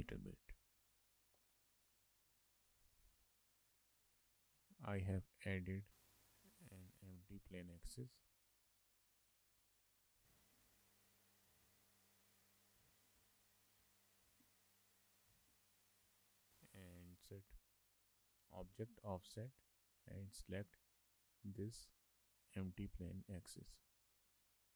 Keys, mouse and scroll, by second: 0.4 shift+middle click, 2.4 middle click, 2.6 shift+middle click, 4.0 middle click, 5.9 click, 6.0 shift+middle click, 6.3 shift+middle click, 7.2 shift+middle click, 7.4 middle click, 7.7 shift+a, 9.5 click, 9.8 middle click, 10.6 alt+g, 10.9 shift+middle click, 13.2 n, 13.8 n, 14.3 click, 15.1 click, 15.5 shift+middle click, 18.6 click, 19.2 click, 21.5 click, 24.0 shift+middle click.